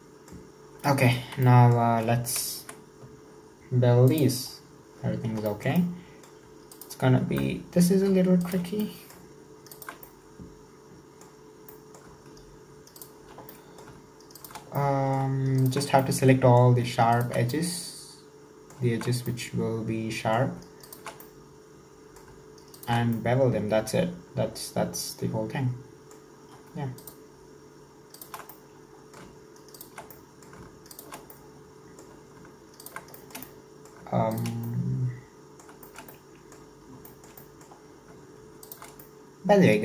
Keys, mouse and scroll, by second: 1.0 2, 1.4-2.6 middle drag, 2.6 KP_1, 4.1-5.1 drag, 5.1 scroll up 1, 5.5-6.8 shift+middle drag, 6.8 alt+right click, 7.3 scroll down 1, 7.4-8.4 middle drag, 8.4 alt+shift+right click, 8.9 middle click, 9.7 alt+shift+right click, 10.1-11.5 middle drag, 11.5 scroll down 2, 11.7-13.0 middle drag, 13.0 alt+shift+right click, 13.5 middle click, 14.3 alt+shift+right click, 14.8 middle click, 15.6 alt+shift+right click, 16.0-17.2 middle drag, 17.2 alt+shift+right click, 17.5-20.8 middle drag, 20.8 alt+shift+right click, 21.3-22.8 middle drag, 22.8 alt+shift+right click, 23.1-26.2 middle drag, 26.4-27.0 scroll up 1, 27.0-28.3 alt+shift+right drag, 28.5-29.8 middle drag, 29.8 alt+shift+right click, 30.2 middle click, 30.9 alt+shift+right click, 31.3-32.8 middle drag, 32.8 alt+shift+right click, 33.2-34.3 shift+middle drag, 34.3 alt+shift+right click, 34.7-36.7 middle drag, 36.7-37.1 scroll up 1, 37.1 shift+middle click, 37.8 scroll up 2, 38.7 alt+shift+right click, 39.0-39.8 middle drag.